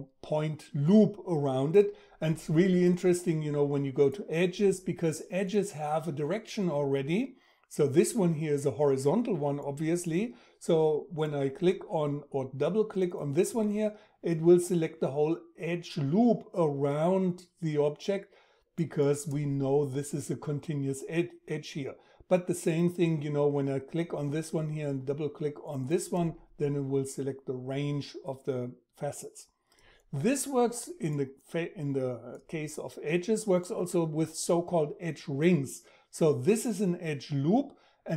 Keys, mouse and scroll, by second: 12.4-27.3 drag.